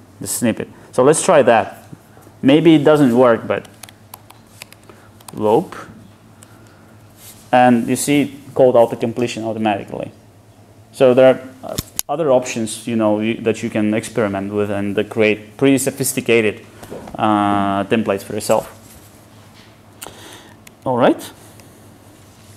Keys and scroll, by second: 19.1 Escape.